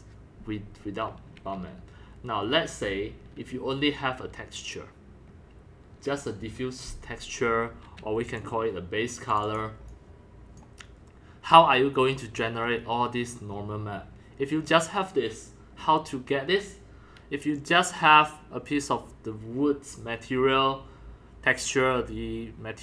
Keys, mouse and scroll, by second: 8.3 click, 8.4 click, 9.3 click, 9.4 click, 9.9 click, 10.8-22.8 drag.